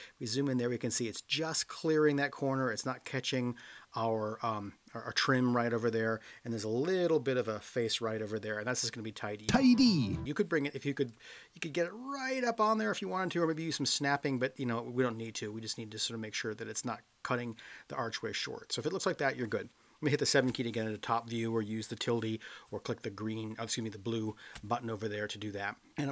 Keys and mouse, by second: 11.1-15.2 drag, 17.5-18.4 middle drag, 20.1 KP_7.